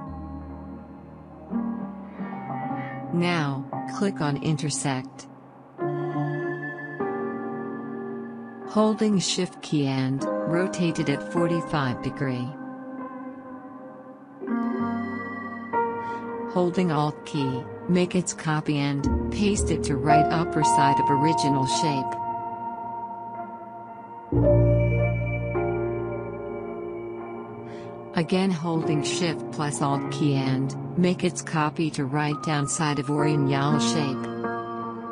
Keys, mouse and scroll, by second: 4.3 click, 10.3 shift+Num_Lock, 10.3-15.8 shift+drag, 18.7-24.0 drag, 28.3 click, 29.8-35.1 drag.